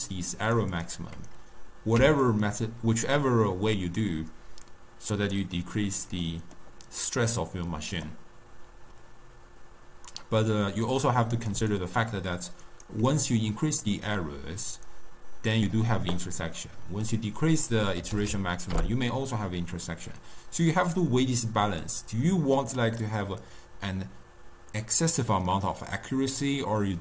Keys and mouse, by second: 0.0-2.4 drag, 6.4-8.2 middle drag, 8.2-11.3 drag, 11.7 d, 11.9-13.0 right drag, 13.0 d, 13.1 d, 14.0-17.1 drag, 17.2-18.4 drag, 18.4 0.